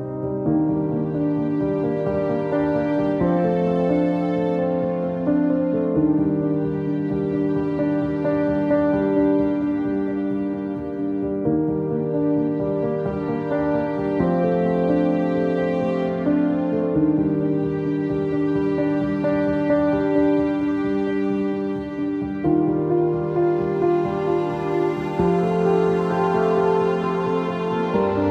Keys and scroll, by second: 2.6 ctrl+z, 5.2 ctrl+z, 14.8 ctrl+z, 21.8 w.